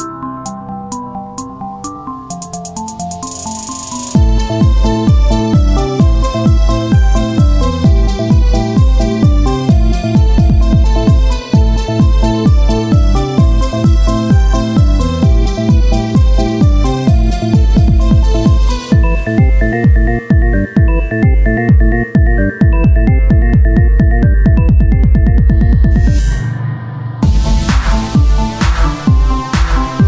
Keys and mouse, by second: 1.0-3.1 drag, 2.0 Tab, 3.1 s, 4.4-6.8 drag, 6.8 Tab, 6.8 s, 8.9 KP_0, 11.9 z, 13.9 t, 15.1-17.6 drag, 17.6 ctrl+z, 24.4-30.0 right drag.